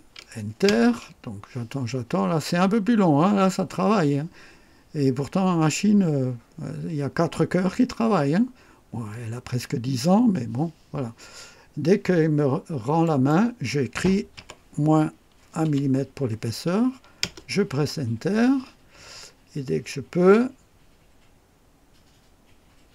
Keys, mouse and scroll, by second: 0.6 Return, 13.0 click, 14.3 KP_Subtract, 15.6 KP_1, 17.2 KP_Enter.